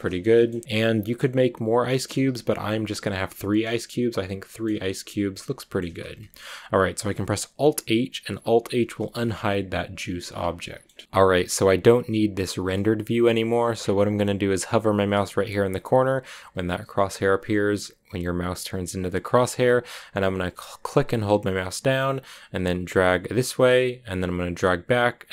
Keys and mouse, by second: 0.6-1.6 middle drag, 2.0-2.3 middle drag, 2.3 a, 3.8-4.5 middle drag, 5.6 middle click, 6.2 middle click, 8.8 alt+h, 9.8 a, 19.4-23.7 drag.